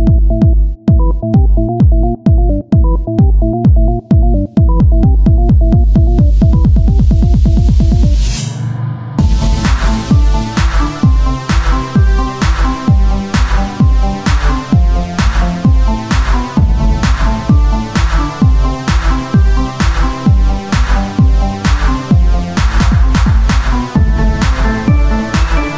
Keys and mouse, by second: 1.7 KP_1, 2.3 z, 8.6 KP_3, 9.7 r, 11.5 s, 13.1-14.1 drag, 13.5 right click, 14.5-18.7 drag, 16.8 s, 18.7 Tab, 19.1 click, 20.1 ctrl+z, 20.5 o, 22.4-24.7 drag, 22.9-24.7 right drag, 25.1-25.7 drag, 25.1-25.7 right drag.